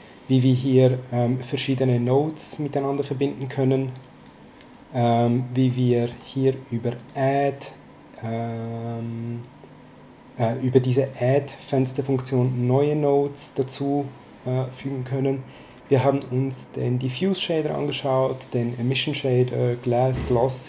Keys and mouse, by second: 0.3 click, 2.5 click, 4.7 click, 5.7 middle click, 7.0 click, 11.0 click.